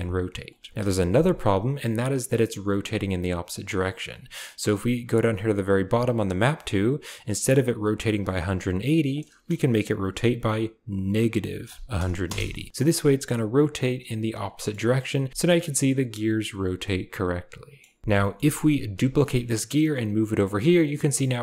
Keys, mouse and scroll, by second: 0.7 KP_7, 8.2-12.2 drag, 12.7 r, 14.5 shift+middle click, 15.3 KP_7, 16.8 middle click, 17.7 click, 18.0 shift+KP_7, 18.2 shift+click, 19.0 shift+d, 21.0 g.